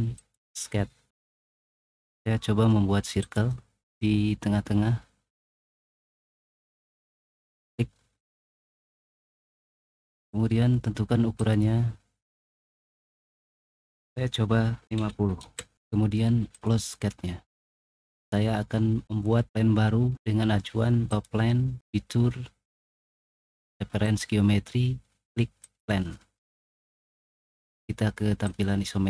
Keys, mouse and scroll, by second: 0.1 click, 3.1 click, 7.3 click, 9.0 click, 10.1 click, 11.3 click, 12.5 click, 14.8 5, 14.9 0, 15.4 Return, 16.4 click, 18.0-19.1 middle drag, 20.3 middle click, 21.4 middle click, 23.2 middle click, 23.7 middle click, 24.5 middle click, 27.2 middle click, 28.5 click, 28.5 middle click.